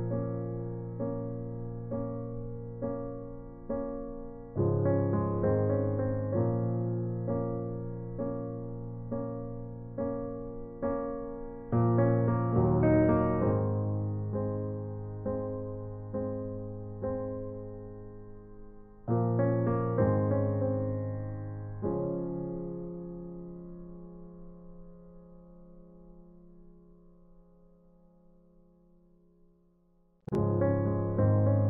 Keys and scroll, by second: 5.5 ctrl+t, 10.2 alt+shift+Return, 14.2 space, 23.4 b, 24.5-25.3 typing.